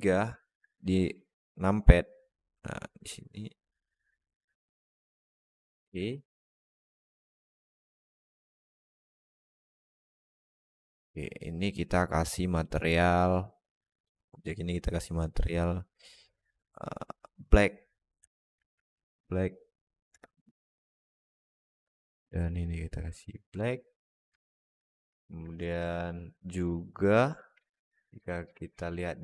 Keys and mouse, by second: 0.3 r, 5.4-5.8 alt+middle drag, 6.8-7.4 alt+middle drag, 7.9 alt+middle drag, 8.6 middle drag, 8.9 alt+shift+middle click, 9.3 alt+middle click, 12.6 click, 17.2-20.0 drag, 21.3 click, 24.2 alt+middle drag, 25.0 alt+middle drag, 25.4 click, 26.5 click, 27.2 click.